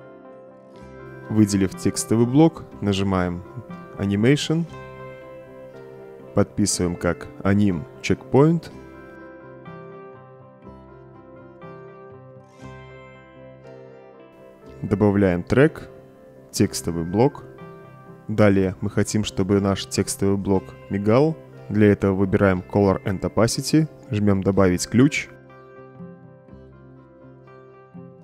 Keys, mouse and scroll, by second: 0.0 click, 0.6 click, 4.7 click, 6.6-8.3 typing, 9.7-12.3 typing, 12.6 Return, 14.1 click, 15.2 click, 17.2 click, 23.6 click, 26.0 click.